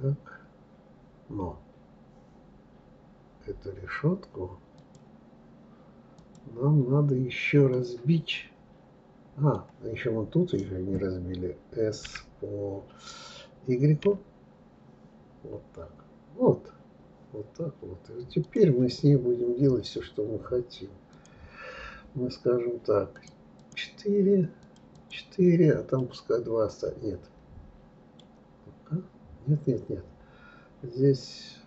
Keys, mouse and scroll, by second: 4.8 click, 6.2 click, 7.7-10.7 middle drag, 21.1 click, 23.2 click, 24.6 click, 26.0-28.6 middle drag, 28.6-29.8 scroll up 1, 29.8-31.6 scroll up 1.